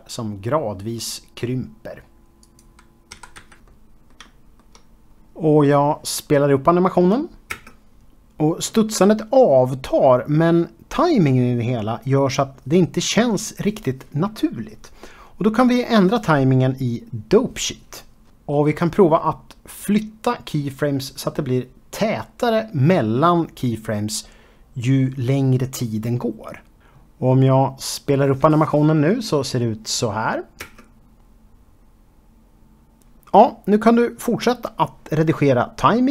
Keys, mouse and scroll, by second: 0.0-3.1 typing, 0.0 click, 0.1 click, 0.4 click, 0.5 click, 1.1 click, 1.5 click, 1.6 click, 2.4 click, 2.5 click, 2.9 Escape, 3.2 click, 5.6 ctrl+space, 6.3 Left, 6.6 shift+middle click, 7.7 space, 12.5 space, 15.5 ctrl+space, 16.6 ctrl+Tab, 18.2 click, 18.5 g, 19.0 click, 19.7 click, 19.9 g, 20.2 click, 20.6 click, 20.8 g, 21.3 click, 21.5 click, 21.9 g, 22.4 click, 22.9 g, 23.2 click, 23.5 click, 23.9 g, 24.5 click, 24.7 click, 25.3 g, 25.8 click, 26.4 g, 26.6 click, 27.0 ctrl+space, 28.5 shift+Left, 29.0 space, 32.5 space, 33.1 click, 33.2 Tab, 33.3 middle click, 33.6 shift+middle click, 33.9 click, 34.0 click, 34.1 click, 34.3-36.1 typing, 34.4 click, 34.5 click, 34.6 click, 34.9 click, 35.4 click, 35.5 click, 35.6 click, 35.7 Escape.